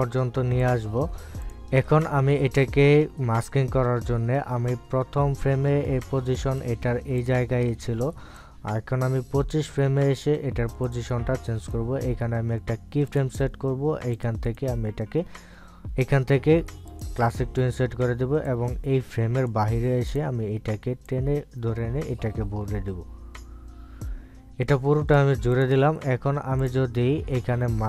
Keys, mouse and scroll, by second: 0.6 click, 7.0 click, 12.6 right click, 14.0 click, 15.4 right click, 17.8-26.5 drag.